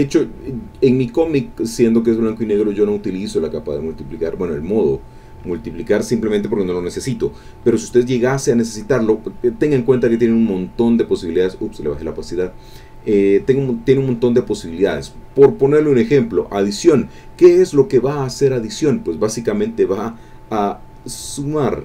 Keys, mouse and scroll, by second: 0.5 click, 1.0 click, 1.8-4.1 drag, 4.2 click, 4.9 click, 9.9 click, 11.0 click, 12.1 click, 16.0 click.